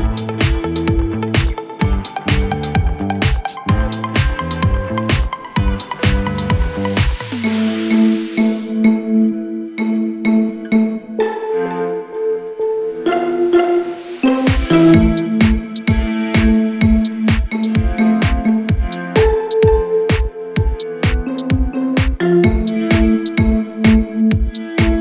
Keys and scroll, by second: 5.7 c, 5.8 e, 9.2 Delete, 12.4 Delete, 15.1 F4.